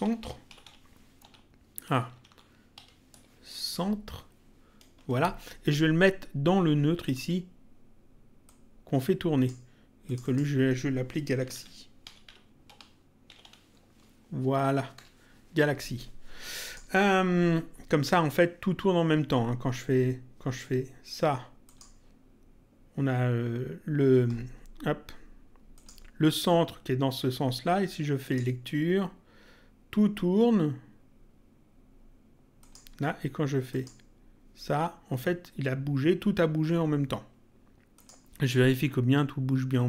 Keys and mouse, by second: 0.0-1.7 typing, 2.1 Left, 2.7 Delete, 3.1 BackSpace, 5.0 Return, 7.0 click, 8.4 click, 10.0 click, 11.2-13.9 typing, 15.0 Return, 16.6 click, 21.7 click, 25.7 click, 28.2 click, 32.6 click, 33.7 click, 38.0 click.